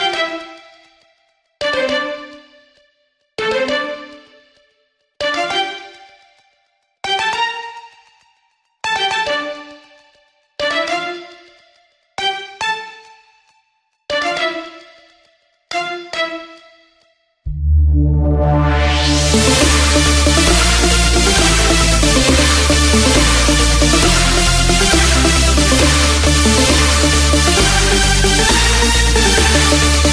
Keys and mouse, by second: 7.1 Tab, 8.4 click, 10.4-11.7 right drag, 11.7 x, 15.8 KP_6, 17.8 KP_Subtract, 21.1 Tab, 22.4 click, 24.4 click, 29.7 click.